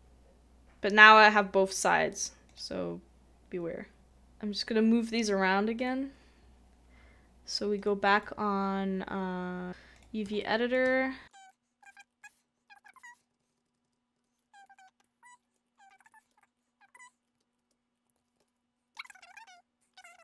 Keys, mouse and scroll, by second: 8.1 a, 8.1 double click, 10.4 shift+middle click, 11.3 shift+middle click, 11.9 shift+click, 13.2-13.5 typing, 14.4 middle click, 14.6 typing, 15.4 shift+middle click, 15.9 typing, 17.7-20.1 typing, 18.0 double click, 20.1 shift+middle click.